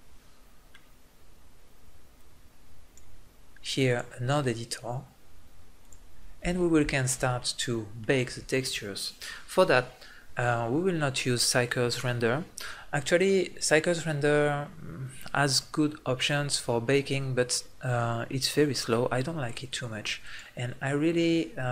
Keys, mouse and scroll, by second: 2.1-6.2 drag, 6.4 middle click, 9.2-20.2 middle drag.